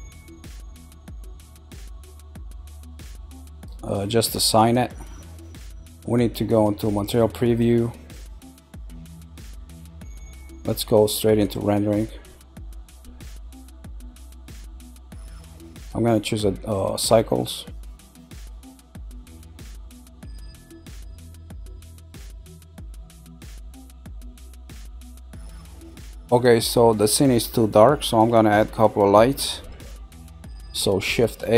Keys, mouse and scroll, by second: 3.3 click, 4.1 click, 8.3 click, 9.6-11.4 middle drag, 11.4 click, 12.2 scroll down 1, 13.0-14.6 middle drag, 14.6 scroll up 2, 17.6 Tab, 17.9-18.7 middle drag, 18.7-19.2 scroll down 1, 19.2-19.9 shift+middle drag, 19.9 scroll up 2, 20.6-22.4 shift+middle drag, 22.4 scroll down 1, 27.8-31.0 middle drag, 31.0 shift+a.